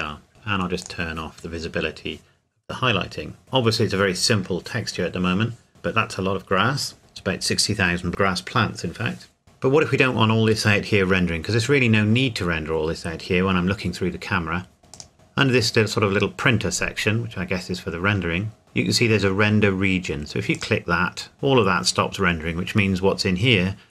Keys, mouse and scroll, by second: 0.8 click, 1.8 click, 15.1 click, 20.5 click.